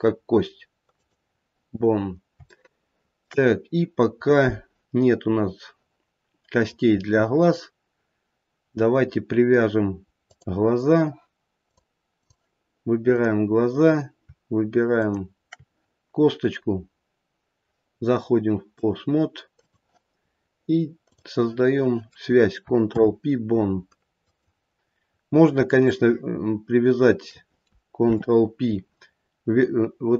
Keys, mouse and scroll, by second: 1.8 scroll down 1, 2.6 shift+middle click, 3.4-4.7 scroll up 2, 10.2 click, 11.6 click, 13.1 click, 14.9 shift+click, 18.6 click, 21.0 click, 22.8 ctrl+p, 24.9-25.7 scroll down 3, 25.7 scroll down 1, 25.9 shift+middle click, 27.2 shift+middle click, 27.9 ctrl+p.